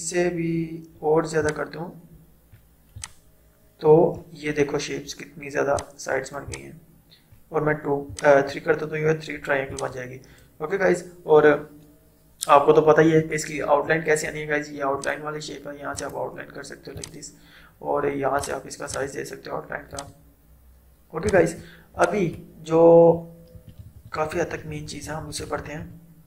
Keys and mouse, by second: 15.0-23.6 drag, 23.6 ctrl+z, 24.2 ctrl+z, 24.9 ctrl+z.